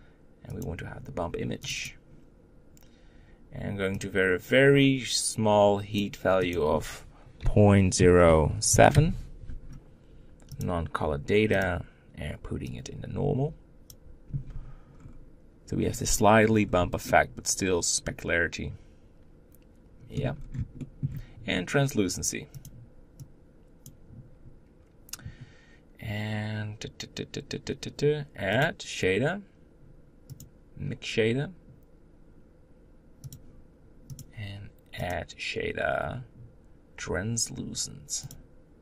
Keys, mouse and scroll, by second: 11.4-14.7 drag, 14.7 scroll up 2, 16.0 scroll up 3, 16.3 scroll down 2, 16.9-19.8 middle drag, 20.1 scroll down 2, 20.5-22.3 shift+middle drag, 22.3-38.8 drag.